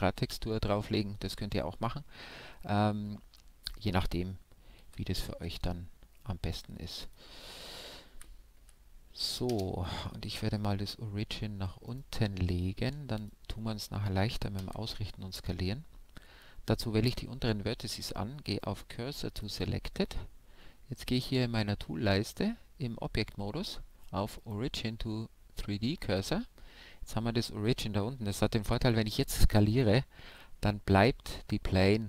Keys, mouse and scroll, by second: 0.4-2.1 middle drag, 1.4 s, 3.7-5.5 drag, 4.7 g, 7.0 Tab, 8.4-11.5 right drag, 11.1 shift+s, 14.5 shift+s, 16.6 Tab, 20.9-22.8 drag, 25.1 s.